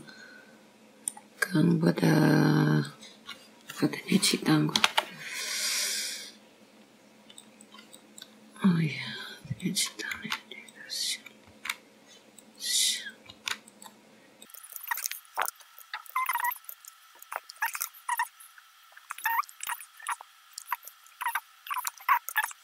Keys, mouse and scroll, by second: 0.5 g, 2.1-2.8 scroll down 2, 2.8 middle click, 2.8 scroll down 1, 4.7-5.0 scroll up 1, 5.9 click, 7.7 ctrl+r, 11.5-12.4 scroll up 2, 12.4 click, 13.0 g, 14.4-17.2 typing, 14.7 click, 14.9 click, 15.2 click, 15.5 ctrl+r, 16.2 click, 16.5 click, 16.8 click, 17.1 click, 17.3 middle click, 18.0 click, 18.3 ctrl+r, 19.7 middle click, 20.0 middle click, 21.1 scroll down 4, 21.3 c.